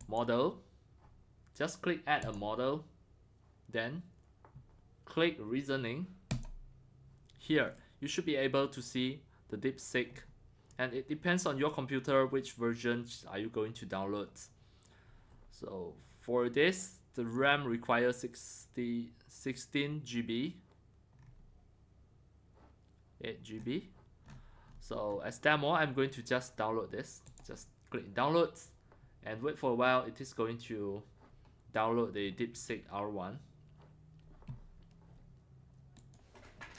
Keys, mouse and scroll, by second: 0.0 click, 2.2 click, 6.3 click, 7.5 click, 7.5-7.9 middle drag, 7.5-8.7 scroll down 4, 8.1-15.2 middle drag, 8.7 scroll down 1, 8.7-10.1 scroll, 10.1-10.6 scroll, 12.8 scroll down 2, 15.2 scroll down 1, 17.4-21.6 middle drag, 17.4 scroll, 21.2 scroll, 22.7-23.6 middle drag, 23.6 scroll, 24.2-24.7 scroll down 9, 24.7-25.1 scroll, 25.4 middle drag, 27.3-32.5 drag, 36.0 click, 36.1-36.7 drag.